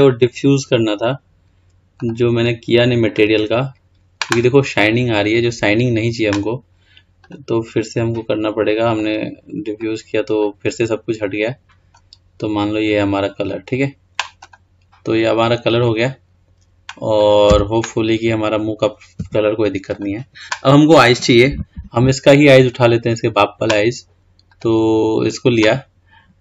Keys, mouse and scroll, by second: 2.2 click, 3.2-6.2 drag, 7.4 click, 14.6 click, 15.2 scroll down 3, 15.5-16.1 scroll up 1, 16.1-17.3 scroll up 1, 17.3 click, 18.0 Tab, 19.4 Tab, 20.0-20.4 drag, 20.9-21.4 scroll down 4, 22.9 click, 24.7 click.